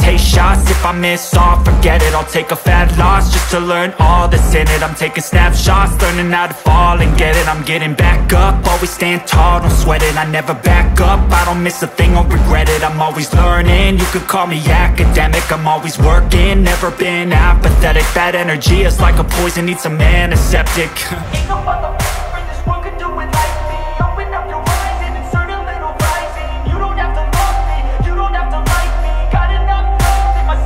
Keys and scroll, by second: 1.7 Up, 1.9 Down, 2.1 Right, 6.2 ctrl+z, 8.3 Up, 9.1 Down, 11.2 Right, 11.3 Down, 11.7 Up, 11.9 Down, 20.1 ctrl+x, 20.8 ctrl+0, 21.5 ctrl+v.